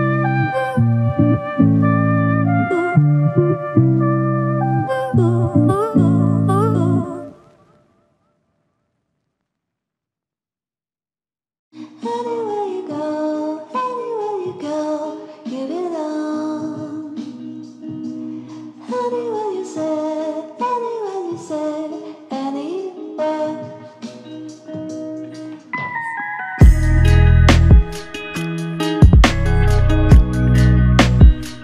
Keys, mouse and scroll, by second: 2.7 5, 3.4 Return, 6.3 ctrl+alt+click, 10.6 ctrl+click, 15.1 shift+click, 23.5 ctrl+click, 29.1 ctrl+alt+click, 29.9 alt+shift+click, 31.0 alt+click.